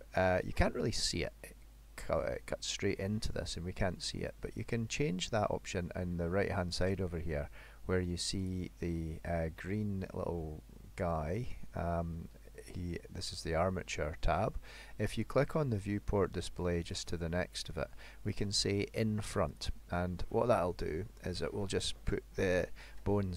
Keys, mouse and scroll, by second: 6.9 click, 8.4 click, 16.9 click, 19.6 click.